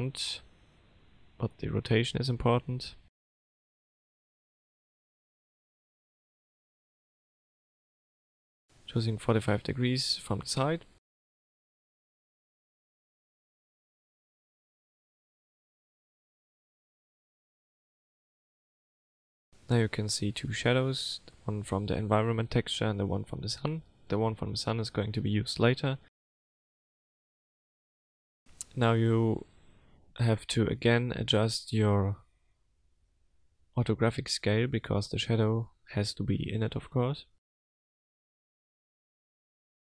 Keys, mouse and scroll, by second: 0.1 click, 0.4 middle click, 1.0-1.6 scroll down 3, 1.7 middle click, 2.2 shift+middle click, 3.1 click, 5.0 click, 6.1 middle click, 7.1 click, 8.7 click, 9.4 click, 11.6 click, 12.6 click, 13.8 click, 15.4 middle click, 17.3 KP_0, 19.0 click, 20.9 scroll up 1, 22.2 click, 23.0 click, 28.9 click, 32.6 click, 34.5 click, 35.7 click, 36.8 click, 38.8 click.